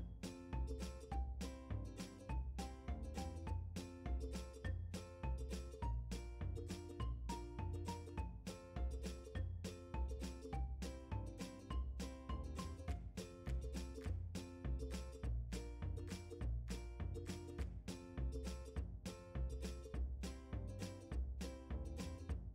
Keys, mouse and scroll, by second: 3.6 click, 5.2-6.3 scroll down 1, 8.4 ctrl+KP_1, 10.6 KP_1, 11.6-12.1 scroll up 1, 12.1 a, 12.6 scroll up 1, 13.6 scroll down 1, 18.5 click, 20.3 ctrl+KP_1.